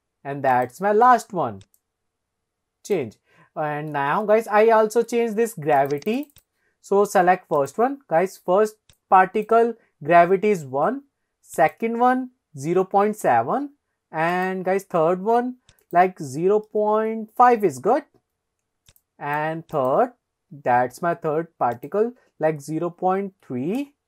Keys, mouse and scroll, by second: 0.6 click, 1.8 click, 4.3 shift+middle drag, 4.8 middle click, 5.8 click, 6.1 click, 6.5 click, 7.6 click, 9.0 click, 11.6 click, 14.4 click, 15.9-18.0 drag, 19.0 click, 19.8 click, 21.8-24.0 drag.